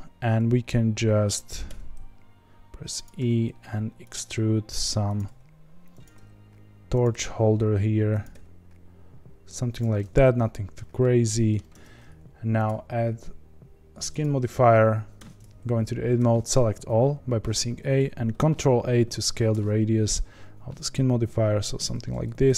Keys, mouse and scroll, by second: 1.6 e, 3.1 e, 4.2 e, 5.2 e, 6.1 e, 7.1 e, 8.3 e, 9.9 middle click, 10.8 scroll down 1, 11.0 middle click, 11.7 Tab, 14.2 click, 15.1 Tab, 16.1 a, 19.3 ctrl+a.